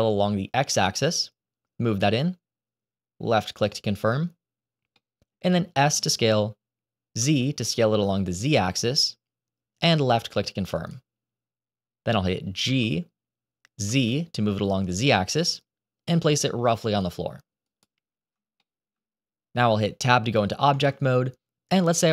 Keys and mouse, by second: 4.8 middle click, 5.7 s, 12.5 g, 18.5 shift+middle click, 20.6 Tab, 21.6-22.1 middle drag.